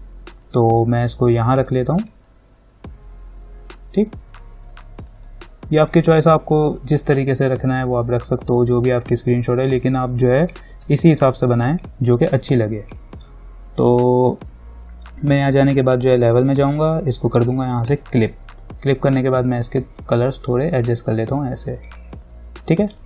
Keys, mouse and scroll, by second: 1.5-5.2 alt+drag, 10.9 ctrl+=, 13.1 click, 16.2-21.8 drag, 20.1-21.8 drag.